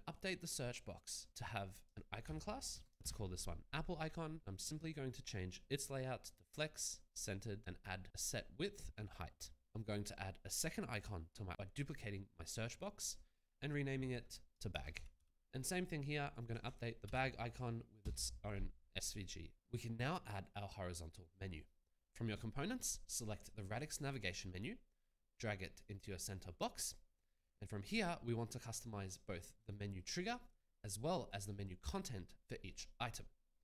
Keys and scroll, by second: 2.7 BackSpace, 3.0 Return, 11.5 ctrl+d, 14.9 a, 15.2 g, 17.0 ctrl+a, 17.5 ctrl+v, 18.0 Return, 19.6 alt+Tab.